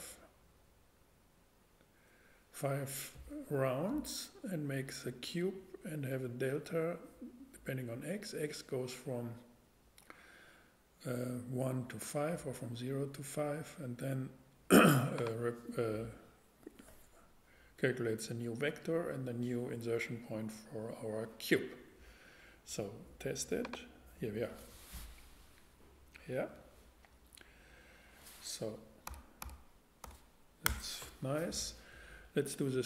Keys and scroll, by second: 29.1 a, 30.0 x, 30.6 Return.